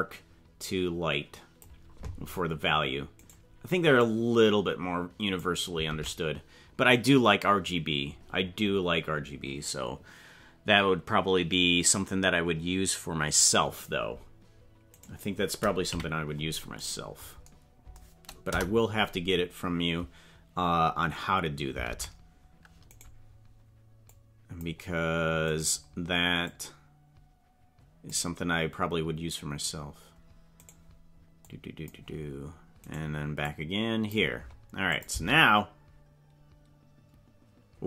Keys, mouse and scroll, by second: 3.3 right click, 4.0-5.4 drag, 5.9 ctrl+Tab, 8.2-9.1 scroll down 12, 15.0 right click, 15.9 KP_Decimal, 18.5 KP_0, 21.9 ctrl+Tab, 23.0 right click, 24.1 click, 25.5 right click, 26.4-28.1 drag, 30.7 right click, 31.5 click, 32.9 right click, 33.4 click, 35.1 click, 35.1 space.